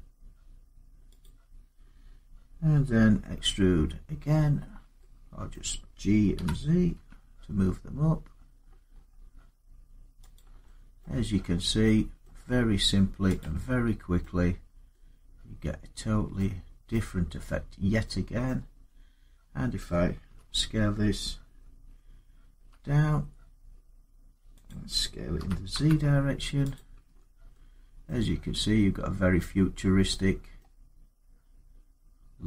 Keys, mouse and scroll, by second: 1.0 click, 5.3-11.6 middle click, 6.1-6.7 typing, 8.3 scroll, 8.4-9.9 scroll up 13, 10.1 click, 10.8 middle click, 11.2 Tab, 12.0 middle click, 13.3 click, 14.7 middle click, 18.2 middle click, 18.6 Tab, 20.0 a, 22.3 s, 24.4 click, 25.2 typing, 26.5 click, 26.9 Tab, 27.9 middle click, 28.8 middle click, 28.9 middle click, 29.0 middle click, 30.4 middle click, 30.7 scroll.